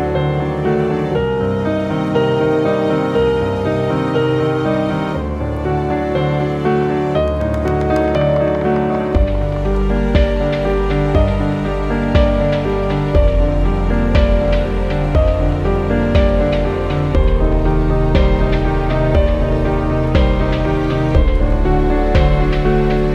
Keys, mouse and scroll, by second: 0.5-2.1 drag, 2.7 ctrl+t, 3.5-5.5 drag, 6.2 shift+Down, 7.5 click, 7.9 ctrl+t, 8.7-14.0 drag, 14.0-14.4 scroll down 1, 15.0 shift+Down, 16.7 shift+click, 18.0 scroll down 1, 18.3 scroll up 1, 18.6 ctrl+t, 19.1-21.8 drag, 21.8 right click.